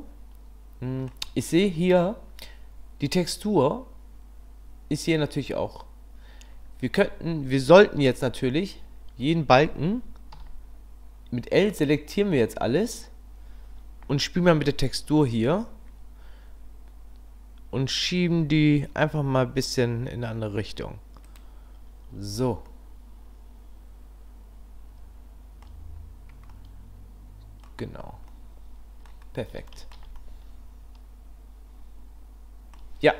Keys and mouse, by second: 8.2 Tab, 10.3 l, 15.1 a, 18.3 g, 22.1 Tab, 22.7-25.6 drag, 26.5 drag, 26.8 middle click, 27.0 click, 27.2 middle drag, 27.2 click, 27.4 click, 27.9-28.8 middle drag, 28.8 click, 28.9 middle click, 29.0 click, 29.1 middle click, 29.7 shift+middle drag, 30.2-31.9 middle drag, 31.9 click.